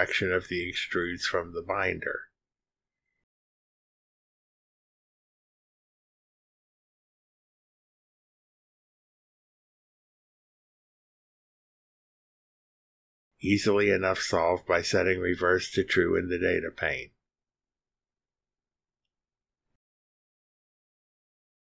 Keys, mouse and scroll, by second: 0.6 click, 0.8 space, 1.8 click, 2.4 click, 2.5-3.9 typing, 3.0 click, 5.1 click, 5.4 space, 7.5 click, 8.1 click, 8.9 click, 10.9 click, 12.0 click, 12.5 click, 13.1 click, 13.4-14.0 drag, 13.4-14.0 right drag, 14.8 click, 14.9 space, 15.2-15.7 drag, 16.0 click, 16.3-18.5 typing, 16.6 click, 17.3 click, 18.0 click, 18.4 click, 19.0 click, 19.3-20.8 drag, 21.2 click, 21.3 space.